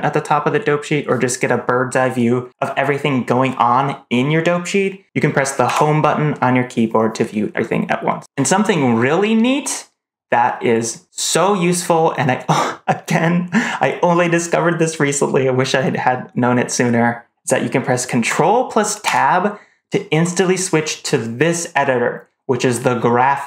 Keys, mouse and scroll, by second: 5.5 Home, 19.0 ctrl+Tab.